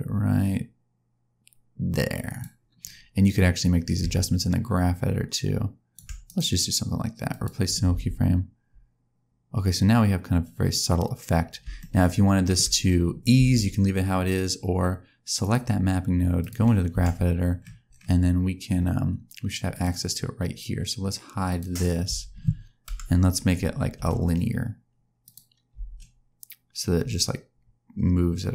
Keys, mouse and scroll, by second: 3.9 click, 6.2 right click, 7.8 space, 11.7 shift+middle click, 13.3 space, 15.3 click, 16.3 click, 17.5-18.4 scroll down 5, 19.6 click, 21.4 click, 22.0 a, 22.8 KP_Decimal, 23.5-24.1 scroll down 2, 23.9 t, 25.7 space.